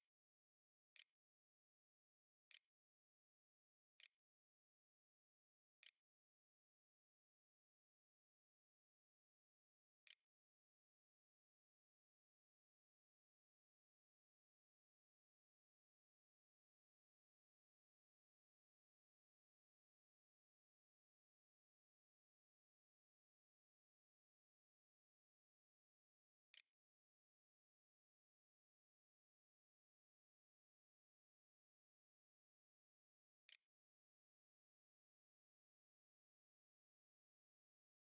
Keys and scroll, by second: 0.0-2.1 typing, 4.1-6.1 typing, 8.2-11.6 typing, 10.5 Delete.